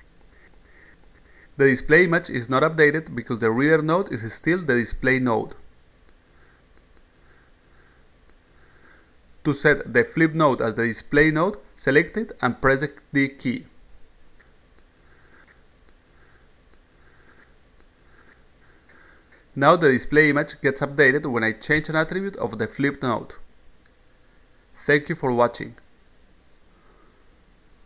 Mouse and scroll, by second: 1.2 click, 2.3 click, 3.1 click, 4.4 click, 7.3 click, 17.9 click, 19.7 click, 20.6 click, 24.2-27.8 drag.